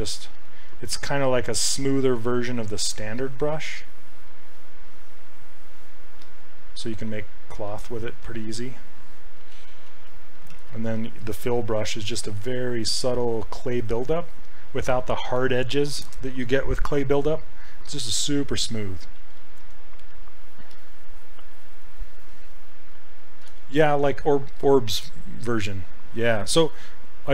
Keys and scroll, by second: 0.3 s, 2.1 s, 9.6 ctrl+z, 9.8 ctrl+z, 10.6 ctrl+z, 19.2 ctrl+z.